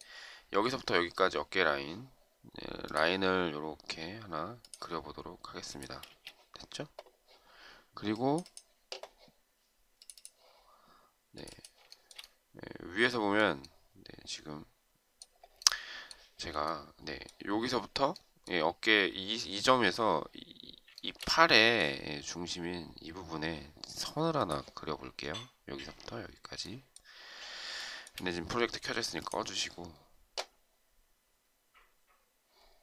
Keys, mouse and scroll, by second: 6.2 space, 12.0 shift+right click, 12.2 shift+double right click, 21.0 shift+right click, 27.8 shift+right click.